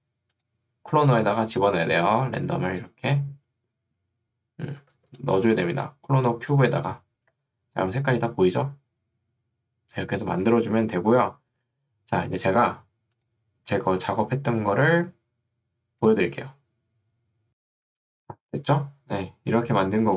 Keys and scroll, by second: 5.0 ctrl+2, 7.4 Escape.